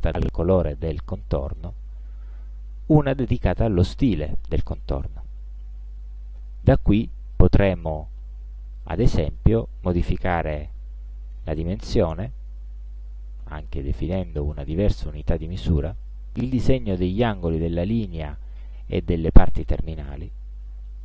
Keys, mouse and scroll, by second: 2.4 click, 11.1 5, 11.6 Return, 13.1 click, 16.1 click.